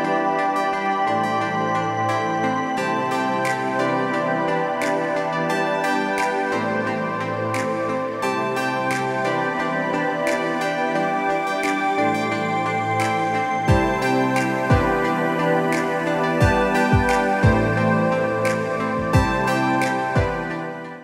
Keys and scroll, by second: 1.9 l.